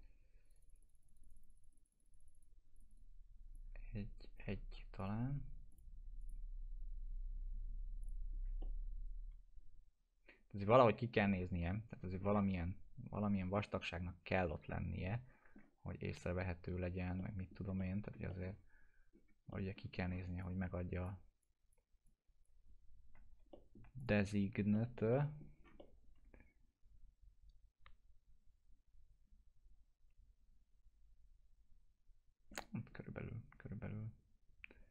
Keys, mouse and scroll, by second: 4.4 1, 5.0 click, 6.8 scroll down 1, 8.0 click, 8.6-12.3 alt+middle drag, 13.5-15.7 alt+middle drag, 15.8 scroll up 1, 17.2-18.6 middle click, 17.8 alt+middle click, 18.5 scroll down 1, 19.5 alt+middle click, 19.9 scroll down 1, 20.4-21.3 drag, 23.1 alt+q, 23.5 alt+middle click, 24.0 click, 24.4 scroll up 1, 24.7 alt+middle click, 25.1 middle click, 25.5 scroll down 1, 25.8-32.6 alt+middle drag, 32.7-34.9 scroll up 2.